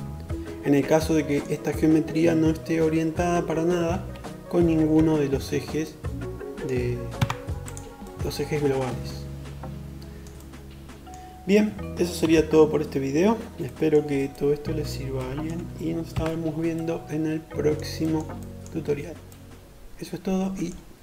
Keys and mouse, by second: 2.5 shift+KP_7, 3.6 KP_5, 5.8 Tab, 6.3-19.6 middle drag, 11.0 shift+KP_7, 14.8 KP_5.